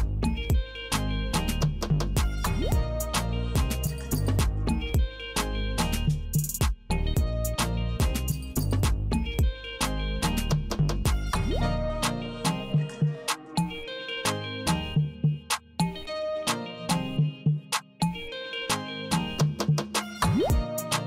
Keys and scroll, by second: 0.7 w, 1.8 w, 2.8 w, 3.8 w, 4.9 w, 5.8 w, 6.8 w, 7.8 w, 9.7 Right, 11.3 c, 13.3 Right, 14.7 w, 16.5 w, 17.7 w, 18.9 w, 20.7 Tab.